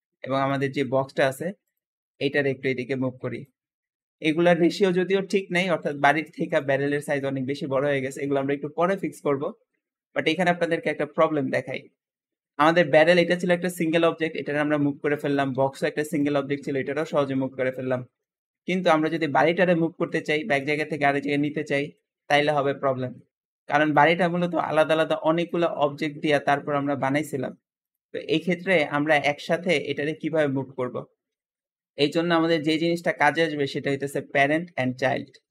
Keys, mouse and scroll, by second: 0.4 shift+click, 0.7 shift+middle click, 1.5 click, 2.5 click, 3.9-6.4 shift+middle drag, 6.4 shift+click, 12.5 g, 14.2 g, 15.1 click, 15.5 g, 16.5 g, 17.5-18.1 scroll up 4, 18.1 middle click, 19.0 shift+click, 19.3 g, 20.5 click, 20.7 g, 21.8-23.3 middle drag, 23.7 click, 24.3 g, 25.2 click, 25.7-27.7 shift+middle drag, 27.7 shift+click, 28.1 g, 29.0-35.5 middle drag.